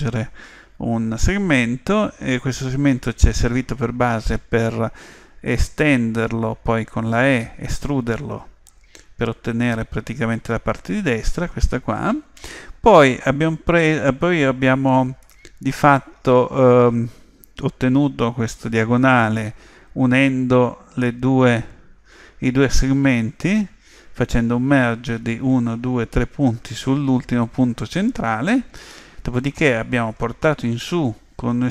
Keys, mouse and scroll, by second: 15.3-17.1 middle drag, 29.0-30.7 middle drag.